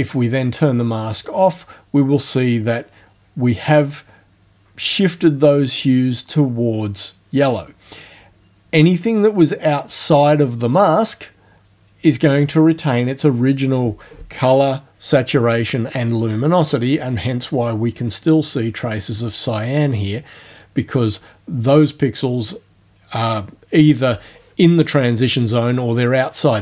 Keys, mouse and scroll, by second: 1.3 click.